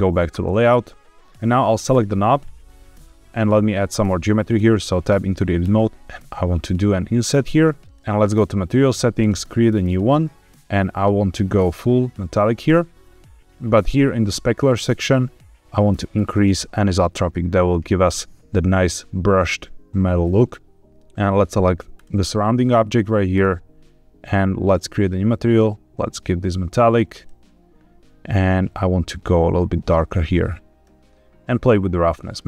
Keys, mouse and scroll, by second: 1.2 click, 1.2 a, 1.8 click, 3.0 Tab, 3.0 middle click, 3.2-3.7 scroll up 1, 3.7 middle click, 4.5 Tab, 5.6 i, 7.7 click, 8.0 Tab, 8.1 click, 9.1 click, 11.1-12.3 drag, 14.1 click, 14.5-15.6 scroll down 2, 15.6-17.2 drag, 20.2-20.9 scroll up 2, 20.9 click, 21.8 click, 23.2 click, 25.4-27.2 drag, 28.3 click, 31.5-32.4 drag.